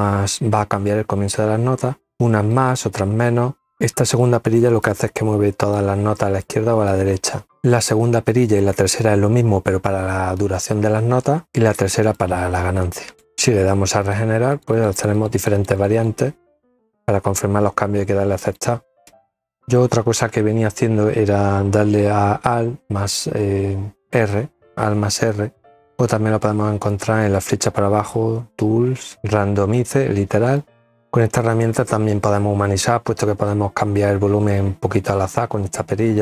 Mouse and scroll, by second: 2.1 middle click, 4.3 click, 5.9 click, 11.5-12.6 drag, 13.2 click, 13.7 click, 13.9 click, 14.1 click, 14.3 click, 14.6 click, 14.8 click, 15.0 click, 15.1 click, 17.6 click, 26.1 click, 29.4 click, 32.2-34.9 drag, 35.4-36.2 drag.